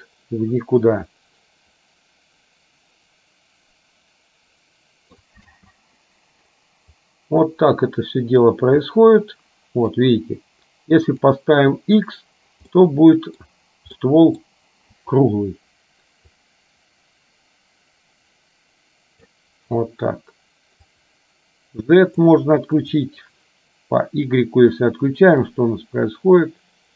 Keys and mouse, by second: 0.8-5.1 middle drag, 5.5 space, 7.1-8.9 drag, 9.4 middle click, 11.3 click, 12.9 middle click, 14.0 middle click, 16.5-19.4 drag, 21.0 click, 22.9 click, 25.6-26.9 drag.